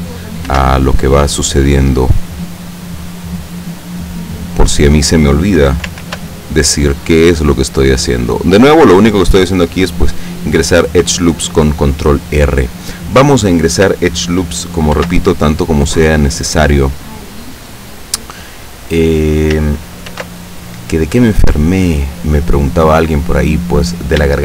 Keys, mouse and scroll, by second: 0.6 ctrl+r, 3.5 click, 4.8 click, 6.1 ctrl+r, 7.1-8.9 drag, 15.0 ctrl+r, 15.7 click, 17.9 click, 20.2 ctrl+r, 20.8 ctrl+click, 22.4 click.